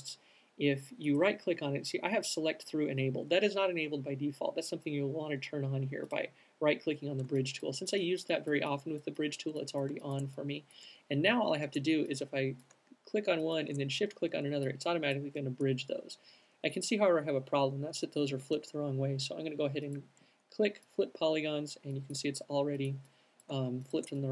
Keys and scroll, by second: 20.5 alt+super+z, 23.6 alt+shift+super+z.